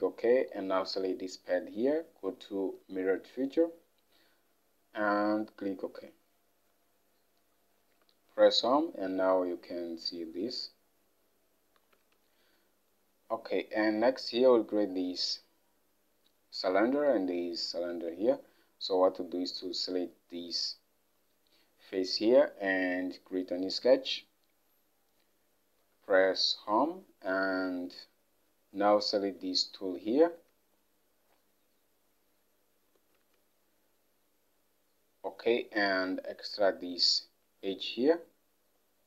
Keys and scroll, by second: 8.1 Home, 12.0 alt+Tab, 26.0 Home, 30.4 alt+Tab.